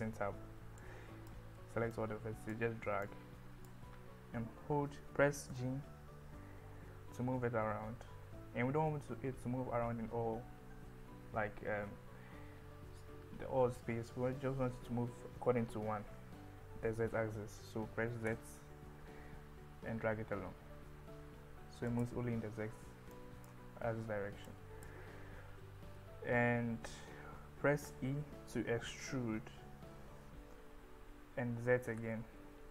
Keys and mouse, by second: 0.0 Tab, 0.9 click, 2.0 click, 3.1 click, 5.6 g, 18.3 z, 21.9 click, 23.2 click, 24.6 click.